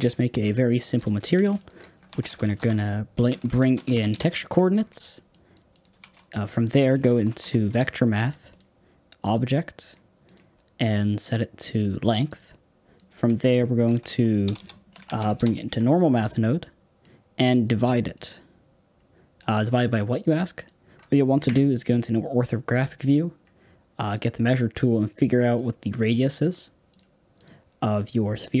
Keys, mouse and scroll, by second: 4.0 o, 7.6 shift+a, 9.2 click, 12.3-15.3 drag, 15.3 BackSpace, 17.7-20.6 drag, 21.4 KP_1, 21.8-22.4 scroll down 7, 22.4-24.6 scroll up 1, 24.6-25.0 scroll up 1, 26.3 click, 27.3-28.3 drag.